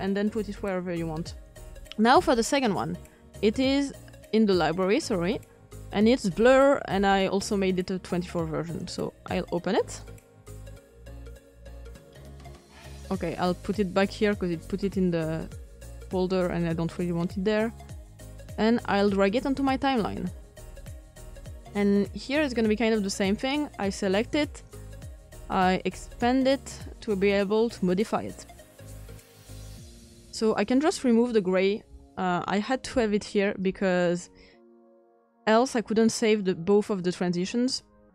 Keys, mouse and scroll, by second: 2.0-7.8 drag, 9.5 click, 13.2-18.9 drag, 20.2-21.7 drag, 32.5 Delete, 38.0 click.